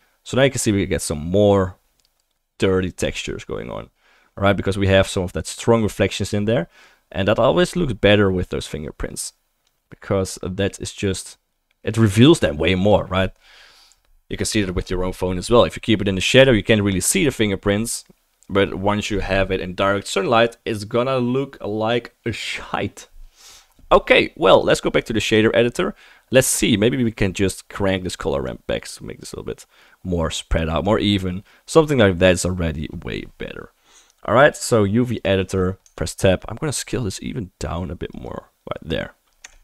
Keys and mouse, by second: 6.3-11.4 drag, 6.3-11.4 middle drag, 6.3-11.4 right drag, 35.9 Tab, 36.9 s, 38.4-39.6 drag, 39.4 Tab.